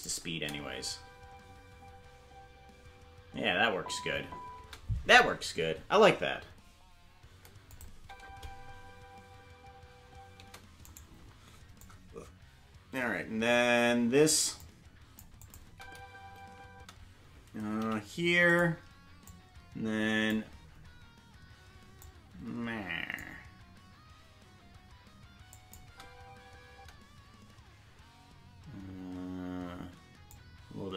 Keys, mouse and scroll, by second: 0.3 space, 4.6 space, 7.7 click, 7.9 space, 11.1 right click, 11.1 space, 11.8-14.3 drag, 14.6 click, 15.4 click, 15.6 space, 17.8 space, 17.8 i, 19.3-20.3 drag, 22.0-23.2 drag, 25.5 click, 25.8 space, 30.3 click, 30.3 space.